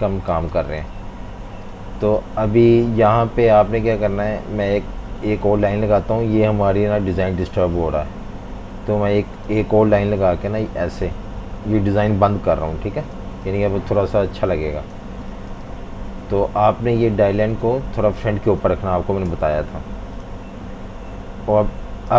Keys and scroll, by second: 0.3-1.6 typing, 10.2 typing, 15.0 v, 15.2 space, 19.2 shift+super+], 22.1 v.